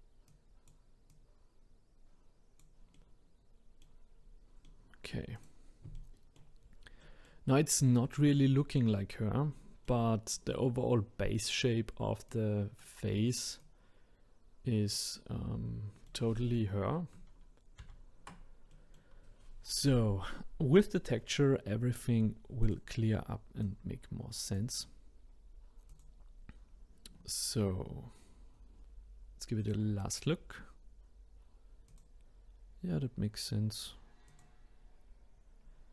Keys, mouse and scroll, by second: 0.3 click, 2.9-4.1 middle drag, 4.1-4.6 scroll down 1, 4.6 middle click, 5.3 click, 5.9-7.7 middle drag, 7.7-8.6 scroll up 2, 8.6-12.3 middle drag, 12.3-13.8 drag, 15.1-17.8 middle drag, 17.8 ctrl+z, 18.7-22.6 middle drag, 22.6 click, 23.6 click, 25.9 click, 26.7-27.2 scroll up 1, 29.6-32.0 drag, 34.3 click, 35.6-35.9 scroll up 4.